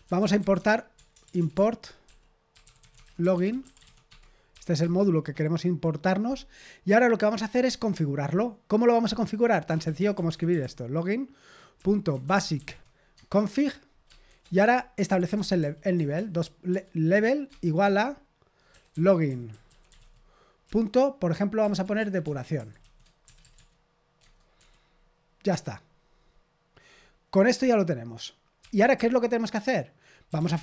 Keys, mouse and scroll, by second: 0.0-5.3 typing, 6.8-9.7 scroll down 1, 9.4-13.2 typing, 14.3-16.7 typing, 18.7-23.5 typing, 24.2 Tab, 24.6 Escape, 28.6 o, 28.9 Return, 30.0-30.6 typing.